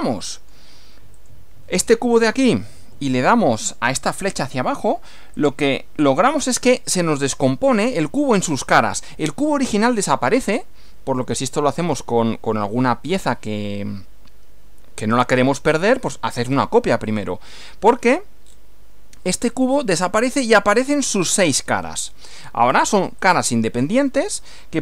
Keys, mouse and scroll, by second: 0.1 shift+middle click, 1.1 click, 5.4 click, 18.5 scroll down 2, 23.3 click.